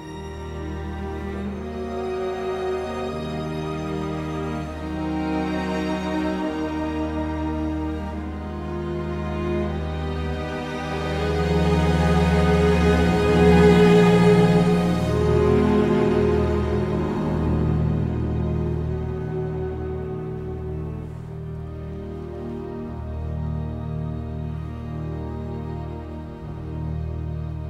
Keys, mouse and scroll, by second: 1.2 KP_1, 1.5 Return, 7.7 Escape, 18.5 F10.